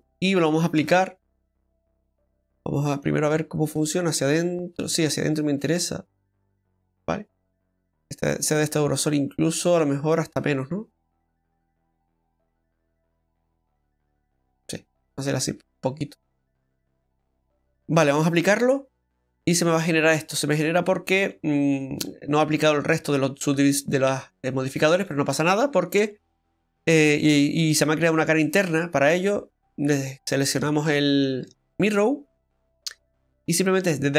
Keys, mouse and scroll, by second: 0.8 Tab, 1.3 middle click, 3.0 click, 8.3 middle click, 8.7-9.6 scroll up 3, 9.1 middle click, 11.6 click, 14.8 click, 14.8 scroll down 2, 15.1 middle click, 18.4 click, 23.5 Tab, 25.3 scroll down 2, 25.5 middle click, 29.6 click, 30.2-30.6 scroll up 2, 30.6 shift+middle click, 30.9 middle click, 31.5 shift+middle click, 31.9 scroll up 1, 32.4 middle click, 32.4-32.8 scroll up 1, 34.0 right click.